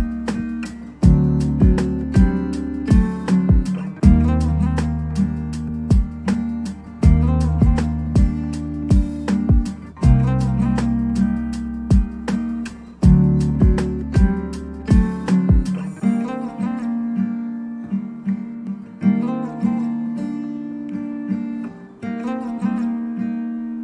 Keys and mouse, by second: 1.3 middle click, 1.3-3.4 typing, 2.2 middle click, 3.9 Tab, 4.2 Tab, 4.4 middle click, 4.7 alt+3, 4.9 alt+3, 5.0 alt+click, 5.5 shift+click, 5.7 middle click, 6.0 middle click, 6.7 middle click, 6.8-8.7 typing, 7.0 ctrl+s, 8.5 ctrl+r, 9.2 Tab, 9.4 Tab, 9.4 ctrl+b, 9.9 Tab, 10.0 middle click, 10.3 ctrl+z, 10.4 ctrl+z, 10.5 ctrl+z, 10.6 Tab, 11.1 ctrl+z, 11.2 ctrl+b, 11.6 Tab, 11.7 middle click, 12.2 Tab, 12.3-16.6 typing, 13.9 click, 14.3 ctrl+r, 14.6 click, 15.1 Tab, 16.4 Tab, 17.0 shift+click, 17.9 middle click, 18.1-18.5 ctrl+z, 18.1 ctrl+middle click, 18.6 middle click, 18.7 3, 18.8 KP_7, 19.1 middle click, 19.4 shift+click, 19.5 ctrl+z, 19.7 shift+click, 20.0 middle click, 20.3-21.4 typing, 20.7 click, 21.3 click, 22.7 g, 22.7 y, 23.5 ctrl+j, 23.7 g, 23.7 y.